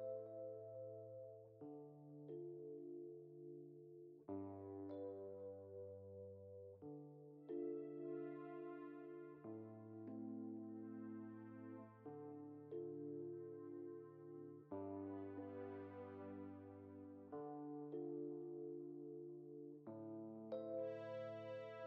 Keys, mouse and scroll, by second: 3.2 click, 6.5-8.4 shift+middle drag, 8.4 scroll up 3, 9.3-10.9 drag, 9.3 scroll up 2, 10.9-15.0 middle drag, 12.0 alt+d, 15.1-15.5 scroll down 2, 15.5-18.4 shift+middle drag, 18.4 click, 19.1 click, 19.7 shift+click, 20.4 shift+click.